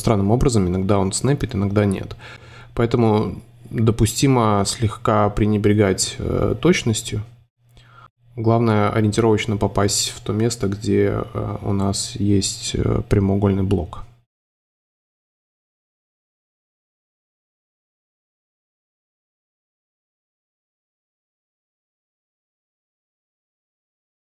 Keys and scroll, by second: 0.8 super+z, 5.8 Up, 7.2 super+z, 9.6-10.4 typing, 11.5 shift+v, 15.0 super+z, 15.7 super+z, 21.3 c, 21.9 BackSpace, 23.5 super+z, 24.0 v.